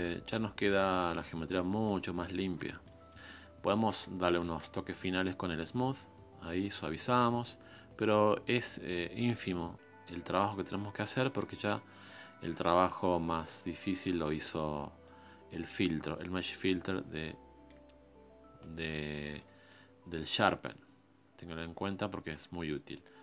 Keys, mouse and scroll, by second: 0.1-4.4 middle drag, 4.4 shift+s, 5.8-10.5 drag, 11.5-13.5 drag, 13.5-15.1 shift+middle drag, 15.1-18.3 drag, 19.0 shift+middle click, 19.9-20.7 scroll up 1, 20.7-22.6 drag, 22.6-23.0 scroll down 7, 23.0 middle click.